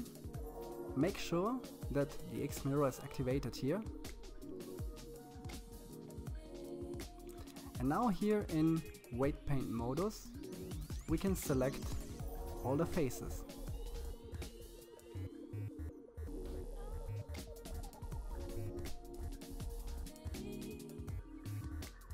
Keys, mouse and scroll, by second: 1.4-5.3 drag, 6.0-7.6 middle drag, 7.6-8.2 scroll up 7, 8.2-9.8 middle drag, 10.4-11.6 middle drag, 11.6 c, 19.2-21.9 middle drag, 21.9 c.